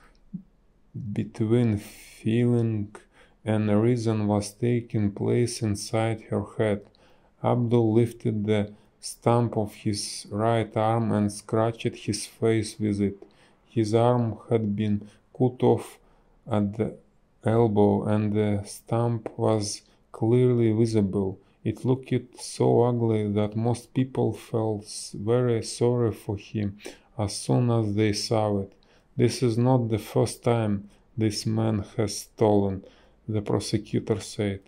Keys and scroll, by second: 0.8 space, 0.9 a, 9.2 space, 17.4 space, 30.0 b.